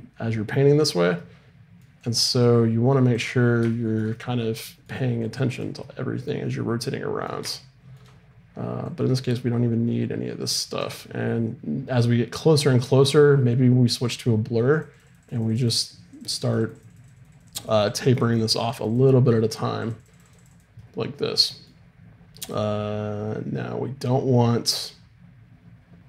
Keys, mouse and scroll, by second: 1.2 right click, 2.0-3.7 drag, 5.2-6.9 drag, 7.5-8.9 middle drag, 8.9-12.0 drag, 13.0-26.0 drag, 20.8 middle click.